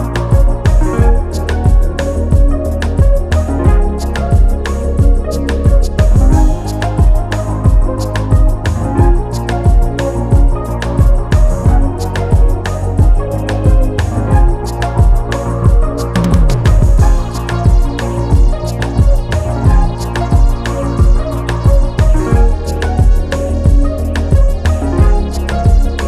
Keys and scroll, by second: 4.3 Return, 12.2 ctrl+t, 14.1 Return, 23.2 ctrl+t, 24.0 ctrl+alt+t.